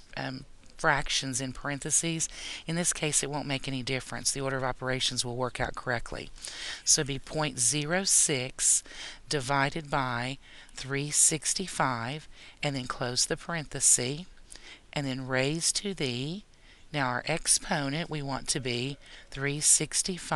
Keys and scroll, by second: 6.6 ., 7.3 0, 7.9 6, 10.9 3, 11.4 6, 12.0 5, 13.1 ), 15.4 ^, 19.3 3, 19.8 6.